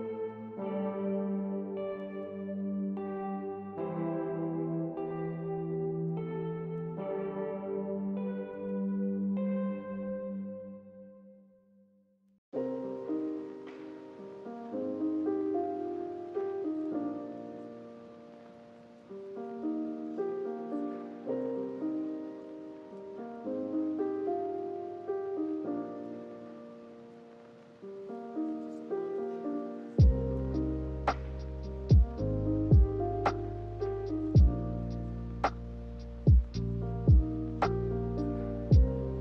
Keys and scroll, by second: 6.3-7.2 typing, 22.0 k, 27.9 a, 36.1 k.